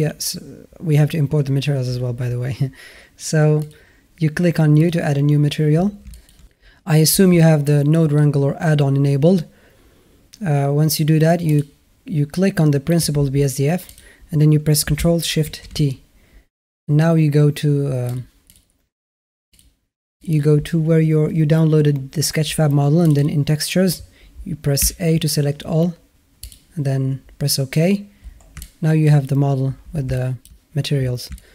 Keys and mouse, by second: 3.5 click, 4.8 click, 6.0 click, 6.0 shift+a, 11.3 click, 13.7 click, 28.4 alt+middle click, 30.1 alt+shift+middle click, 31.3 alt+shift+middle click.